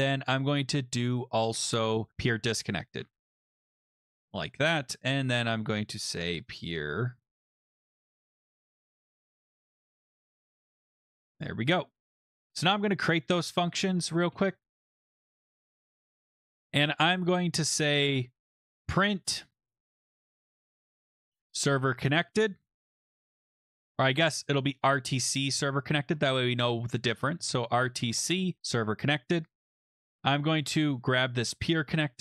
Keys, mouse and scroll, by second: 1.5 click, 1.7 click, 2.7-4.3 typing, 6.9 click, 7.3-10.4 typing, 11.4 click, 12.0 click, 12.6 click, 12.8 click, 13.2 ctrl+c, 13.8 click, 14.1-15.3 typing, 15.2 ctrl+v, 15.3 ctrl+c, 15.5 Return, 15.8 ctrl+z, 16.1 Right, 16.6 scroll, 16.6 click, 16.7 Return, 18.4-22.6 typing, 22.6 Right, 22.7 Right, 23.3 Left, 23.4 Left, 23.8 Left, 24.3 Down, 24.5-25.6 Left, 24.5 Up, 25.8 Right, 26.4-28.3 typing, 30.0 click, 30.2 click, 30.5 r, 30.8 click, 31.2 ctrl+c, 31.8 click.